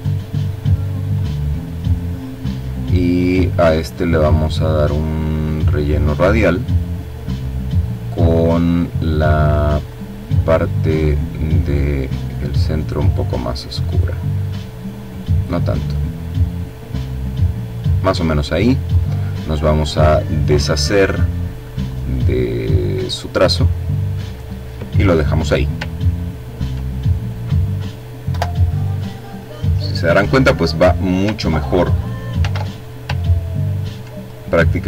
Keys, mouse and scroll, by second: 0.6 click, 4.2 click, 4.8 click, 8.6 click, 11.3-14.4 drag, 16.0-17.0 drag, 17.7 click, 19.8 click, 20.7 click, 22.1 click, 24.7-25.2 ctrl+scroll down 2, 25.7 ctrl+click, 27.1 Delete, 31.1 ctrl+z, 32.2-32.7 ctrl+scroll up 2, 33.0 ctrl+click.